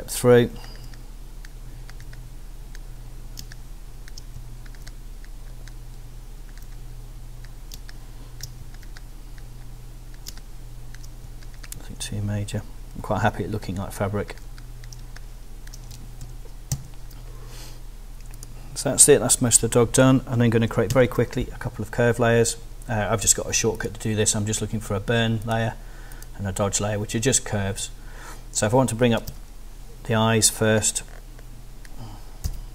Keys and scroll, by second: 3.4 space, 4.4 alt+space, 7.8 space, 8.6 alt+space, 10.3 space, 11.2 alt+space, 15.0 space, 15.9 super+space, 16.2 super+0, 16.7 super+-, 20.9 super+F6, 29.3 z, 32.4 b.